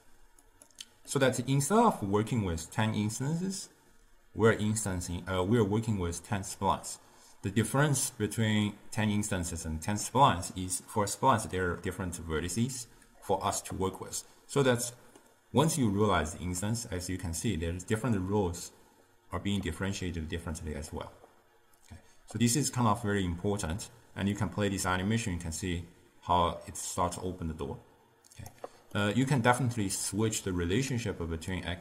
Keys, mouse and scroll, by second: 1.1-4.2 middle drag, 14.1-17.1 middle drag, 24.5-27.5 drag, 29.0-30.1 middle drag, 30.1 click, 31.6-31.8 drag.